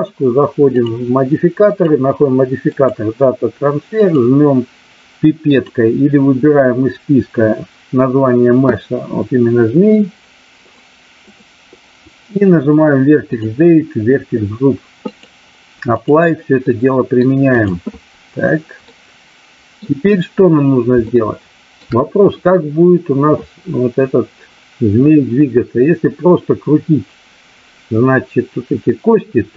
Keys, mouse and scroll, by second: 1.6-2.9 drag, 10.6 click, 13.3 click, 15.0-16.0 drag, 16.5-17.2 middle drag, 17.5 click, 18.8-19.8 middle drag, 21.0-21.8 shift+middle drag.